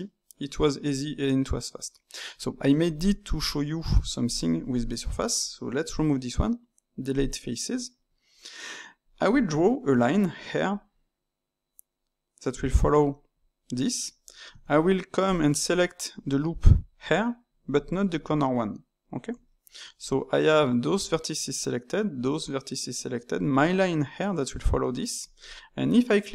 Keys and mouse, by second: 3.7 Tab, 4.2 click, 4.7 ctrl+shift+click, 5.8 x, 7.7-9.9 middle drag, 9.9-10.6 d, 10.7-12.5 drag, 12.5 d, 15.2 alt+click, 17.8 shift+click, 19.5-22.5 ctrl+middle drag.